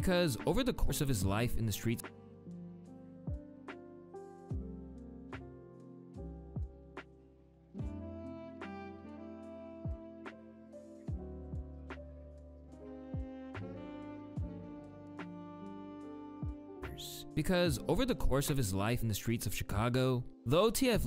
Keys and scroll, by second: 1.3 space, 1.5 space, 4.6 ctrl+d, 5.6 u, 8.6 u, 16.5 space, 20.7 space.